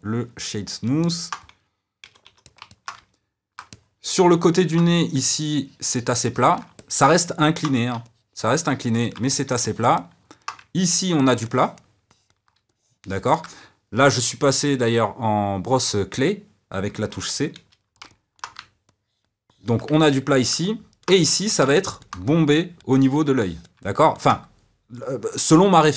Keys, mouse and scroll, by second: 2.0 c, 2.6-5.4 middle drag, 5.4-6.7 ctrl+drag, 6.7-8.0 middle drag, 8.0-9.2 ctrl+drag, 9.2-10.7 middle drag, 10.7-17.5 ctrl+drag, 17.5 c, 18.1 middle click, 18.8-19.9 ctrl+drag, 19.9-21.2 middle drag, 21.2 f, 21.6 middle click, 22.2-23.8 drag, 23.8-25.9 middle drag.